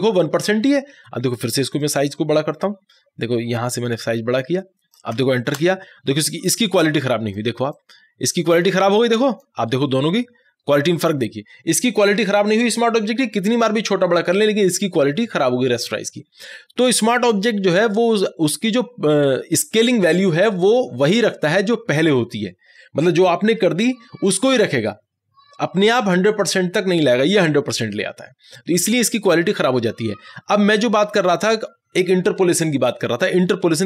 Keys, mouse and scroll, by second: 1.8 ctrl+t, 1.8-5.6 ctrl+drag, 5.6 ctrl+Return, 6.4-13.4 ctrl+drag.